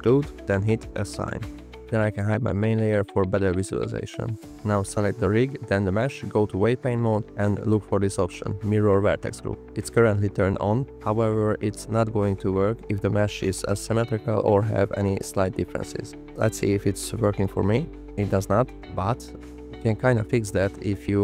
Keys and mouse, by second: 1.7 alt+h, 2.2 click, 6.2-7.0 drag, 11.2 click, 13.4 f, 13.7 click, 15.1 click, 17.7 alt+click, 19.6 ctrl+z.